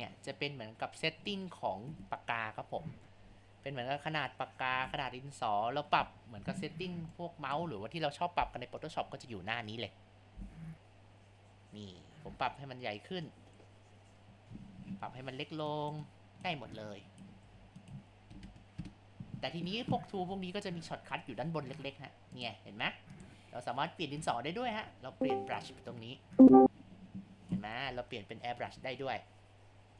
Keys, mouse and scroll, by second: 3.1 click, 4.0 ctrl+z, 4.3 click, 4.9 ctrl+z, 7.3-8.4 ctrl+alt+drag, 8.8 click, 11.3 click, 13.1-14.3 drag, 14.5 ctrl+z, 15.7 click, 16.1-17.5 drag, 17.5 ctrl+z, 17.8-20.8 drag, 22.3 click, 24.2-27.8 drag, 27.8 ctrl+z, 28.2-29.9 drag.